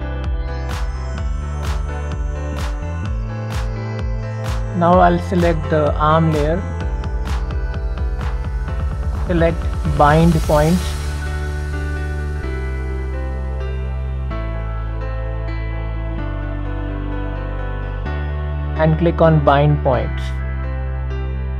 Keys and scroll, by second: 14.2 Escape.